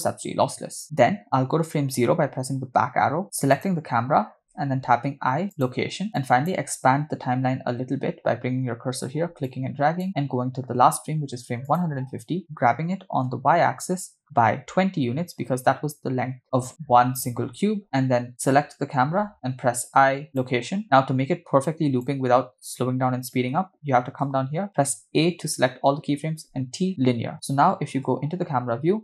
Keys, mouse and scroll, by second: 1.3 Right, 2.1 Left, 3.5 click, 5.1 i, 6.2 click, 9.4 click, 11.9 drag, 13.4 g, 16.5 click, 18.4 click, 19.6 i, 21.7 click, 25.0 a, 26.5 t, 28.1 KP_0.